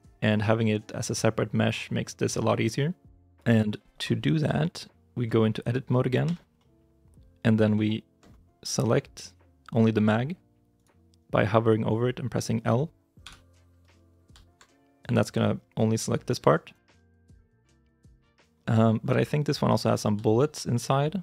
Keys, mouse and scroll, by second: 4.6 shift+i, 5.2 shift+middle click, 5.2-6.1 scroll up 1, 6.1 Tab, 7.0 middle click, 7.7 shift+middle click, 8.3-10.3 scroll up 1, 10.6 right click, 13.1 l, 14.9 g, 16.8 ctrl+z, 17.9 shift+middle click, 18.9-19.5 scroll up 1, 19.5 middle click, 19.6-20.0 scroll, 20.1 shift+z, 20.6 shift+middle click.